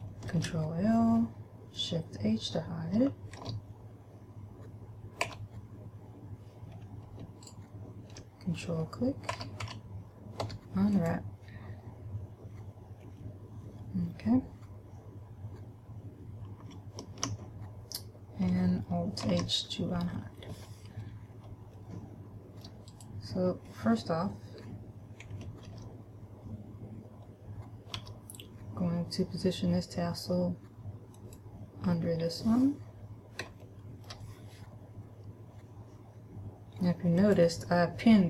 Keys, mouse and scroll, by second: 0.7 ctrl+l, 3.8 shift+h, 5.7 a, 7.8 ctrl+right click, 9.7 a, 10.1 a, 10.8 u, 19.7 alt+h, 22.2 shift+middle click, 23.7 right click, 26.1 ctrl+l, 28.2 g, 31.7 click, 32.2 scroll down 2, 32.5-33.2 scroll up 1, 34.0 shift+middle click, 37.6 click.